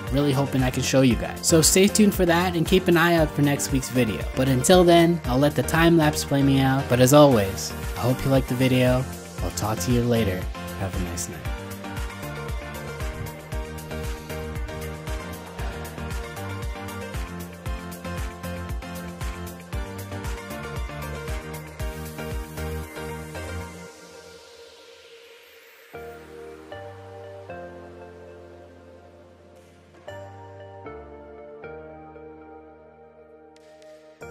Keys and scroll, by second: 9.6 alt+h.